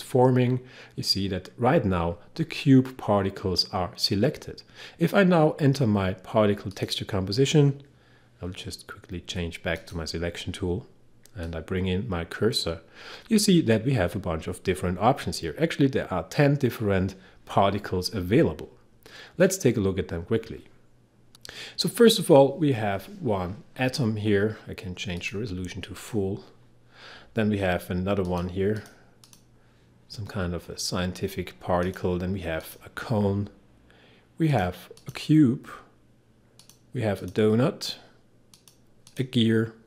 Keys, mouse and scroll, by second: 7.6 click, 9.8 click, 11.5-15.5 drag, 20.0-20.4 scroll up 1, 25.2 click, 31.9 click, 34.7 click.